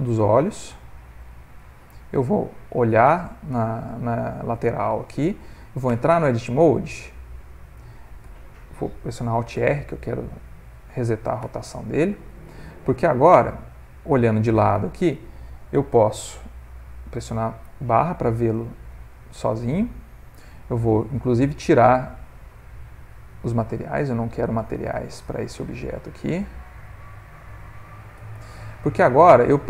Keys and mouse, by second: 4.2 click, 5.0 ctrl+middle click, 5.9 Tab, 8.3 Tab, 9.6 alt+r, 11.4 Tab, 13.5 middle click, 17.6 /, 18.5 ctrl+middle click, 19.0 middle click, 23.7 click, 24.9 Tab, 25.9 click, 26.4 click, 27.0 click, 27.5 click, 28.2 Tab, 28.7 middle click, 29.5 middle click.